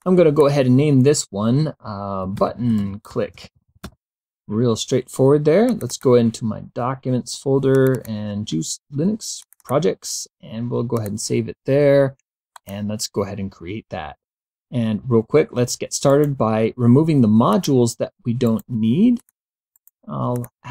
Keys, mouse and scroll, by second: 0.0 click, 2.0-4.3 typing, 5.7 click, 7.8 click, 9.5 click, 11.0 click, 12.6 click, 16.1 right click, 17.5 click, 18.5 right click, 19.2 click, 19.8 right click, 20.3 click.